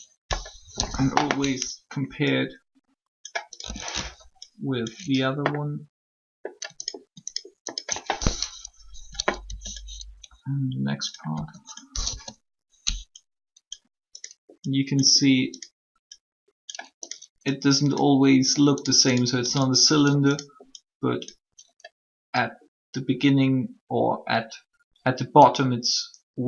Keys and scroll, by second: 0.7 shift+1, 8.2 shift+3, 9.4 e, 11.3 s, 12.0 1.